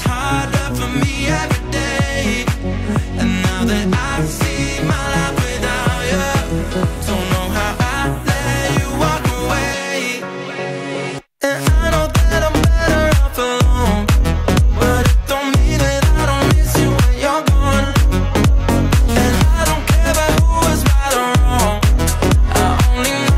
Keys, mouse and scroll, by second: 2.2-2.7 shift+middle drag, 2.7 scroll up 2, 3.0 z, 3.7-4.7 shift+middle drag, 4.7 Tab, 5.2 middle click, 5.6 Tab, 6.2 click, 6.9 Tab, 7.2 Tab, 8.0 shift+d, 8.6 r, 10.1 r, 12.6 r, 13.9 Tab, 14.4 Tab, 14.7 shift+middle click, 14.9 click, 15.6 r, 16.6 r, 18.3 r, 19.1 Tab, 19.5-19.8 shift+middle drag, 19.8-20.7 scroll down 1, 20.7 scroll down 1, 20.7 Tab, 21.5 Tab, 22.3 g.